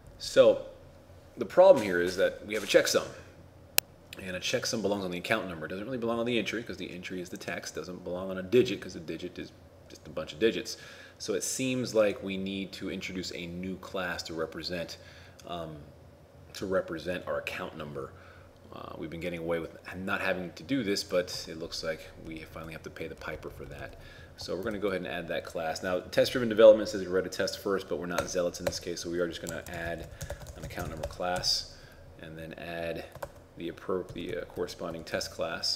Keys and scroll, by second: 21.4 ctrl+Tab, 21.7 ctrl+Left, 22.3 ctrl+Up, 24.8 ctrl+shift+a, 29.5 shift+a, 30.6 shift+n, 33.3 ctrl+Tab, 34.2 ctrl+Left, 34.4 ctrl+Up, 35.2 ctrl+shift+a.